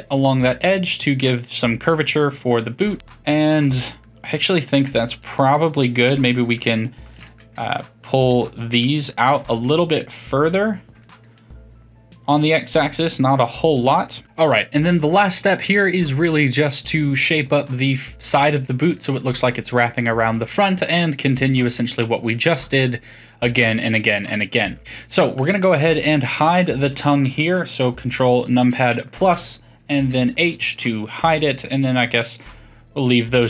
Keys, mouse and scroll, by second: 0.4-4.9 middle drag, 4.9 2, 5.1 click, 5.3-7.0 middle drag, 7.0 shift+click, 7.3-9.4 middle drag, 9.4 s, 11.3-14.2 middle drag, 14.2 click, 24.5-25.1 middle drag, 25.1 3, 25.3 click, 26.6 click, 28.5 ctrl+KP_Add, 30.0 h, 31.7 click.